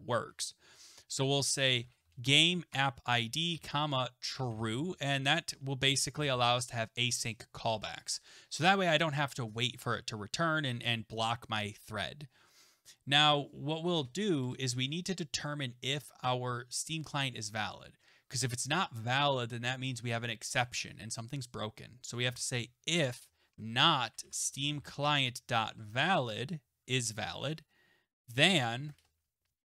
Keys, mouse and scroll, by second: 1.5-6.3 typing, 8.5 click, 8.5 click, 12.5 click, 13.9 Return, 14.4 Return, 22.0-26.1 typing, 27.1 Right, 28.6-29.3 typing.